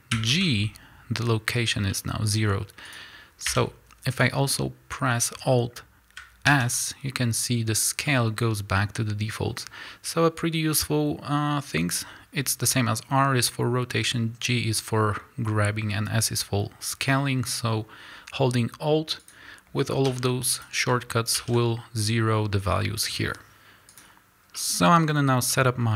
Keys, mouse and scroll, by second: 0.1 alt+g, 2.9 click, 4.9 scroll down 2, 5.1-19.2 middle drag, 6.5 alt+s, 16.8-19.2 scroll up 2, 19.2 click, 20.0 s, 20.6 click, 21.3 alt+s, 23.9 click, 24.5-25.9 middle drag.